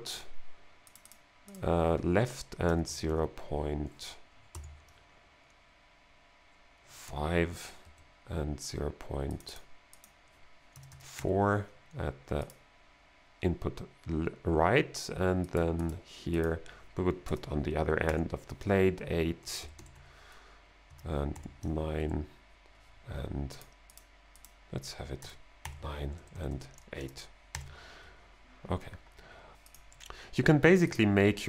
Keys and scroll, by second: 2.7 BackSpace, 4.6 ., 7.0 5, 7.8 Down, 10.8 BackSpace, 11.2 4, 17.3 BackSpace, 18.1 8, 19.4 Right, 20.9 BackSpace, 21.3 9, 22.0 Down, 25.2 BackSpace, 25.6 9, 26.0 Right, 27.0 BackSpace, 27.5 8, 29.5 BackSpace.